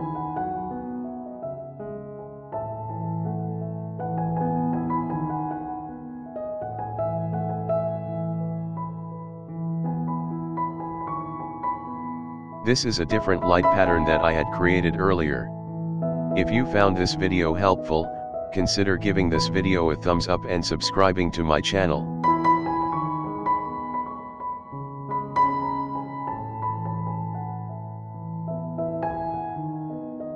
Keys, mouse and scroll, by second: 0.5-3.8 shift+middle drag, 9.5-10.1 middle drag, 10.3-12.1 shift+middle drag, 12.4-15.3 shift+middle drag, 15.4-16.7 shift+middle drag, 19.2-19.9 scroll down 2, 19.9-20.7 shift+middle drag, 20.9 scroll down 1, 21.4-24.0 shift+middle drag, 26.0-26.4 scroll down 3, 26.4-27.0 scroll up 1, 27.0-27.7 scroll up 1, 29.3-30.3 drag.